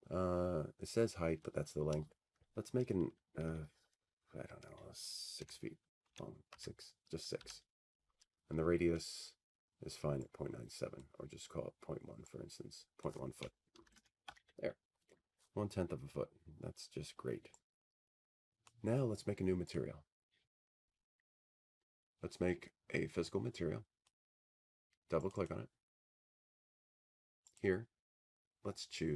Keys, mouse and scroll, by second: 1.5 click, 3.8-6.0 drag, 7.1-9.2 drag, 10.9 6, 12.1 BackSpace, 13.0 Return, 16.6-20.8 drag, 19.8 Tab, 24.2 click, 25.5 click.